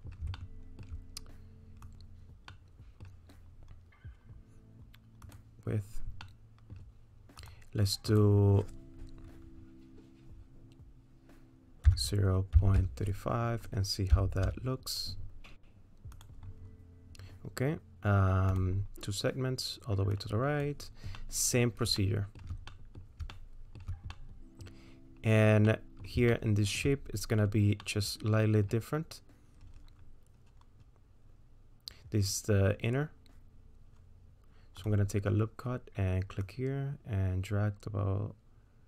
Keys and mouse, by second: 0.4 shift+middle click, 1.9 click, 2.6 click, 2.7 middle click, 5.3 click, 6.3 middle click, 7.5-16.2 drag, 20.2 click, 21.2 middle click, 22.0 shift+middle click, 22.7 middle click, 23.3 shift+middle click, 24.1 click, 25.7 click, 26.3 shift+middle click, 27.8 click, 27.8 right click, 36.4-38.8 drag.